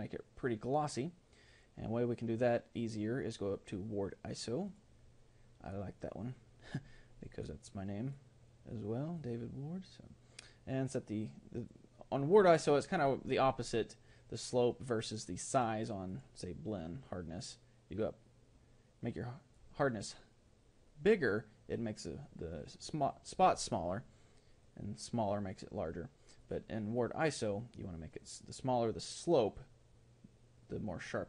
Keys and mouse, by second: 7.3-18.7 drag, 24.7-31.2 drag.